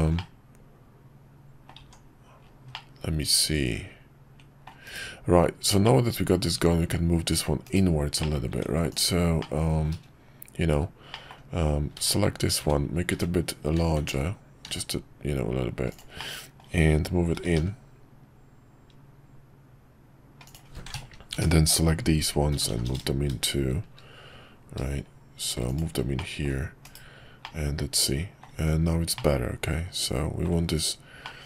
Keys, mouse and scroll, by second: 0.1-1.7 middle drag, 2.7-4.7 middle drag, 5.8-7.5 middle drag, 7.6 /, 8.2 middle click, 8.5 Tab, 9.4 middle click, 11.1 middle click, 12.6 `, 14.6 s, 16.2 middle click, 17.3 g, 21.3 ctrl+KP_Add, 22.5 g, 26.2 middle click, 27.4-28.4 middle drag, 28.5 Tab, 29.1-30.5 middle drag, 31.2-31.4 middle drag.